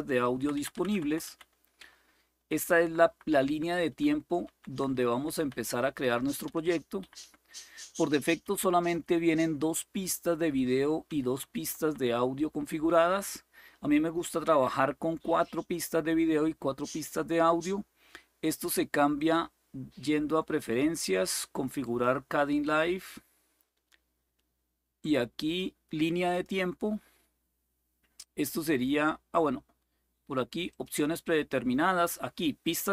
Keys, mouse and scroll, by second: 0.0 Down, 0.4 Down, 0.5 Down, 0.6 Down, 1.5 Up, 2.0 Up, 2.5 Up, 2.8-4.2 Up, 4.2 Down, 4.5 Down, 4.6 Down, 4.9 Down, 5.2-5.8 Up, 6.2 Down, 6.4 Down, 6.7 Up, 6.9 typing, 8.2-11.6 typing, 10.8 Up, 11.1 Down, 14.1 typing, 14.3 Up, 18.9-21.5 drag, 21.6 click, 26.0 click, 30.4 click.